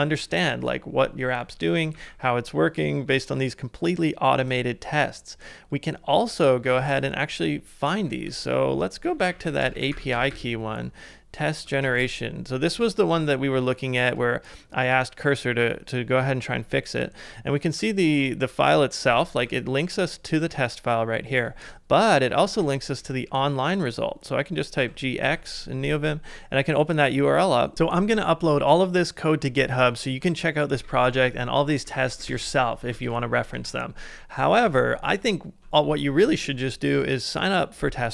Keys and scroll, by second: 0.0-0.1 typing, 1.9 ctrl+d, 6.0-12.3 typing, 12.8 ctrl+c, 16.2-20.3 typing, 21.5 ctrl+c, 22.0-23.5 typing, 24.5-25.7 typing, 27.7 super+Tab, 30.7-31.4 typing, 33.1 ctrl+c, 33.5 super+Tab, 34.6 super+Tab.